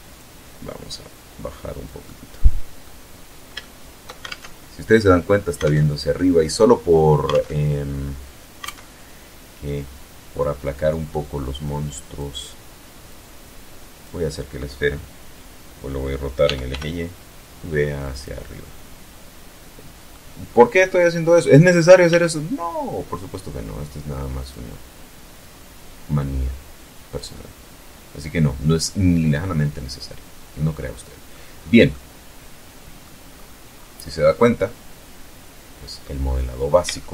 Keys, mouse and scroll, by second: 0.8-1.8 middle drag, 2.4 shift+middle click, 3.1 alt+shift+Tab, 4.4 alt+Tab, 6.1 alt+Tab, 7.4 alt+Tab, 10.4 click, 11.9-13.0 drag, 15.2 r, 15.4 y, 16.9 click, 17.2-19.0 middle drag, 19.2-19.6 scroll up 1, 19.6-19.9 scroll down 1, 20.8 s, 23.1 click, 24.1-27.7 drag, 27.9 scroll down 2, 28.2-30.2 middle drag, 30.3 scroll down 2, 30.7-31.9 middle drag, 32.0-32.5 scroll up 2, 32.5 scroll down 2, 32.9-34.9 middle drag, 35.7-36.2 shift+middle drag.